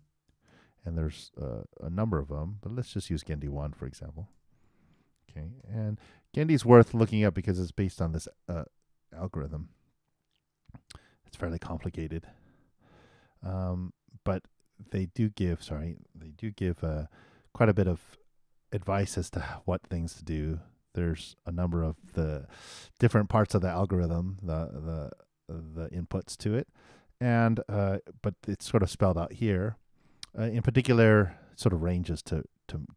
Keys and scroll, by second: 0.0-0.3 typing, 4.8 shift+r, 5.6 shift+9, 9.4 shift+0, 16.5 super+d.